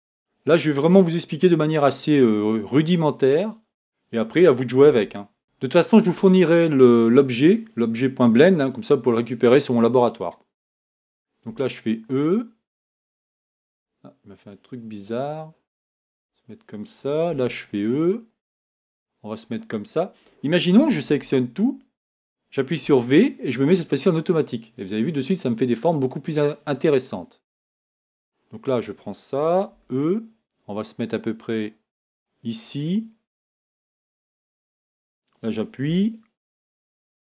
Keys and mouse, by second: 4.9 e, 11.5 e, 17.3 e, 20.7 a, 21.1 a, 22.8 v, 28.0-29.7 right drag, 29.7 e, 34.9 right click, 35.8 g.